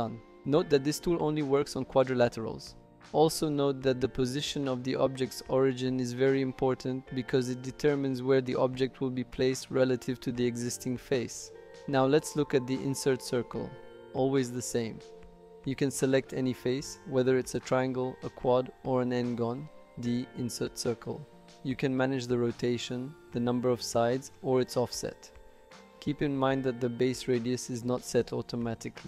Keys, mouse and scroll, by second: 0.1 typing, 0.2 click, 1.0-2.6 middle drag, 4.1 shift+middle click, 5.5-6.0 shift+middle drag, 6.3 click, 6.6 shift+middle drag, 7.0-7.7 typing, 7.3 click, 7.7 middle click, 12.6-21.6 drag, 22.8 click, 23.9 click, 24.8 shift+middle click, 25.1 middle click, 25.7 click, 26.7 click, 27.5 click.